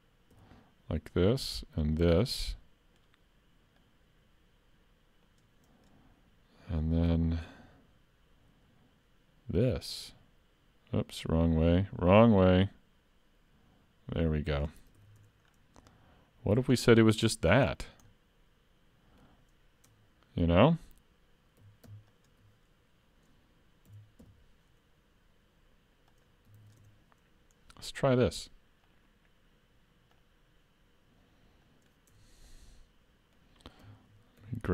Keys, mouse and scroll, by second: 0.4 i, 2.3 middle click, 3.8 click, 7.1 e, 15.0 alt+a, 15.2 Tab, 15.5-16.0 scroll down 3, 15.9 middle click, 16.8-17.1 scroll down 2, 17.3 middle click, 17.7 scroll up 7, 18.1 middle click, 19.9 Tab, 21.6 2, 22.1 alt+click, 23.9 s, 26.6 alt+a, 26.8 Tab, 28.8 click, 31.6 middle click, 32.1 Tab, 32.5 middle click, 34.4 2.